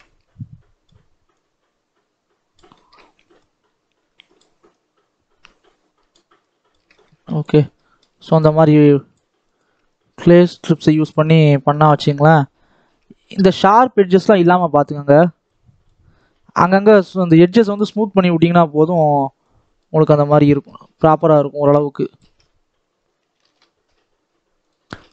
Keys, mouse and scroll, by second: 0.3-2.7 shift+drag, 2.7 shift+middle click, 3.3-6.8 shift+drag, 6.8 scroll down 1, 7.0 middle click, 7.4-7.7 scroll up 2, 7.7 middle click, 8.3-9.8 shift+drag, 9.8-10.5 scroll down 3, 10.5 middle click, 11.4-12.9 scroll up 3, 11.9 shift+middle click, 12.9-13.7 scroll up 1, 13.7-16.7 shift+drag, 16.7 scroll down 2, 16.9 shift+middle click, 17.3-17.8 scroll up 1, 17.8-20.4 shift+drag, 20.4-21.5 shift+middle drag, 21.5 shift+click, 22.3-24.5 scroll down 7, 24.5-25.1 scroll up 1.